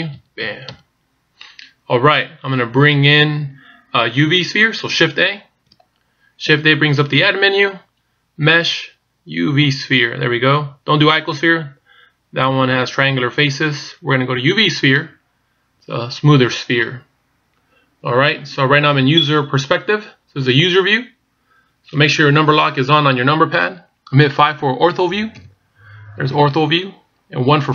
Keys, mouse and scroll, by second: 0.0-0.7 typing, 5.2 shift+a, 20.5-20.9 scroll up 4, 20.9-21.2 scroll down 3, 21.2-23.9 scroll up 2, 25.4 KP_5.